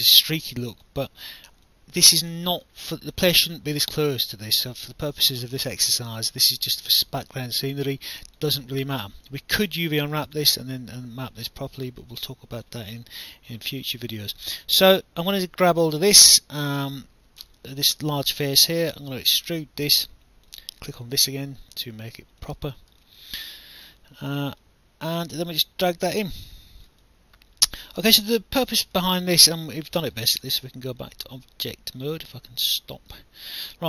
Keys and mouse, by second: 0.1 alt+click, 2.8 alt+click, 5.6 alt+click, 7.3 alt+click, 12.0 alt+click, 13.3 alt+click, 13.7 alt+middle click, 15.3 click, 19.1 click, 20.1 alt+click, 21.1 click, 22.4 click, 23.0 alt+click, 24.6 click, 27.0 alt+click, 29.1 alt+click, 30.1 right click, 33.6 alt+click.